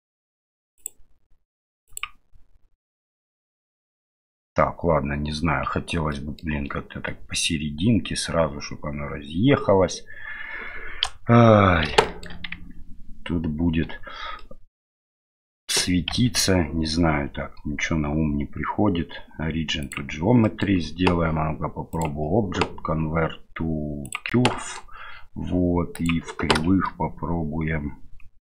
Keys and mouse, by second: 0.8-2.0 drag, 6.1 middle drag, 11.0 KP_1, 12.0 shift+middle drag, 12.5 Tab, 13.8 Tab, 14.4-15.3 middle drag, 16.1 w, 20.4 middle click, 22.0-24.2 drag, 24.5 middle click, 26.0 click.